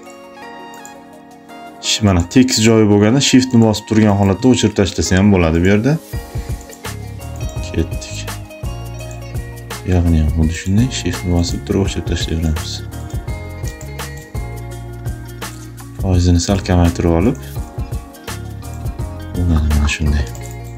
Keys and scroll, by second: 3.8 shift+space, 13.5 space, 20.1 space.